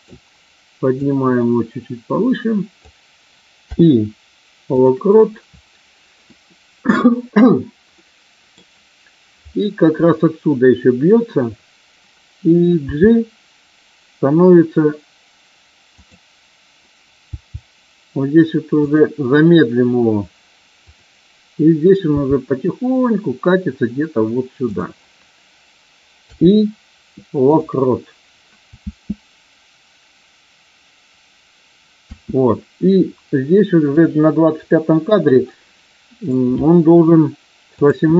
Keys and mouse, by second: 1.0-2.8 drag, 3.5 i, 5.0-6.2 middle drag, 7.9 middle click, 12.8 g, 15.9 click, 17.2 g, 18.7 click, 20.8 click, 22.0 g, 24.7 click, 28.8 space, 32.0 space, 33.9 click, 35.4 middle click, 37.8 click.